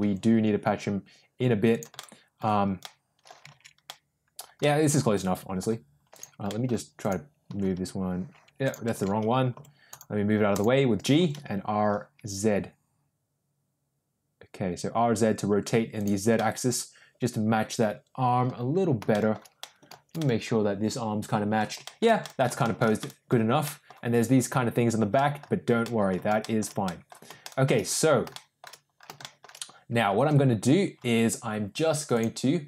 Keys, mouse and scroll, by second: 1.9-2.3 middle drag, 2.7-3.3 middle drag, 3.8 ctrl+z, 3.8-4.3 middle drag, 4.5-5.5 middle drag, 6.4 middle click, 7.1 click, 7.4 r, 9.2 ctrl+z, 9.5 g, 11.1 r, 16.3-18.4 middle drag, 19.0 shift+middle click, 19.5-21.5 shift+middle drag, 21.8 shift+middle drag, 22.1 middle drag, 22.5 shift+middle drag, 22.9 scroll up 1, 23.0 middle drag, 23.5 scroll up 1, 23.6 middle drag, 25.1 scroll up 1, 25.1 middle drag, 25.7-26.0 middle drag, 26.3-26.8 scroll up 2, 26.4 shift+middle drag, 26.8-27.1 middle drag, 27.4 shift+middle drag, 28.2-28.6 shift+middle drag, 29.1 shift+middle drag, 32.0-32.6 drag.